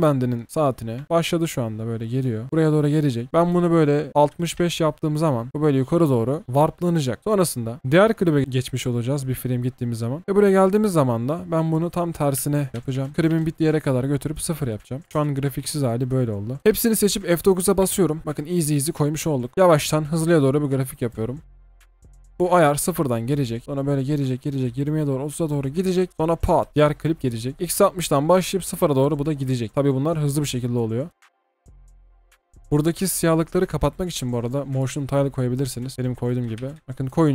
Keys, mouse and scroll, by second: 4.2 typing, 4.6 Return, 7.2 typing, 12.4-13.2 typing, 13.0 Return, 13.1 alt+scroll up 1, 13.3 Return, 15.1 Delete, 15.1 space, 16.6-17.8 alt+scroll down 1, 17.8 F9, 18.8 double click, 19.3 alt+scroll up 1, 19.5-20.2 alt+scroll down 1, 20.2-20.6 scroll down 1, 20.6-21.3 alt+scroll up 1, 21.3-23.6 alt+scroll down 1, 26.7 double click, 26.8 alt+scroll down 1, 31.1 space, 34.2 typing, 36.2-36.8 typing.